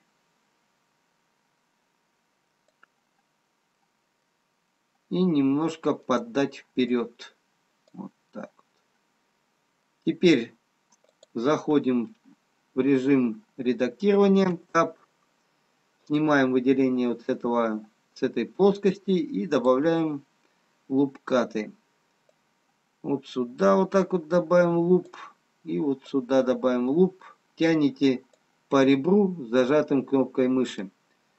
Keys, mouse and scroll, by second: 3.4-4.8 scroll up 2, 7.3 middle click, 7.3 click, 8.6 middle click, 11.2 click, 16.4 click, 26.3 click.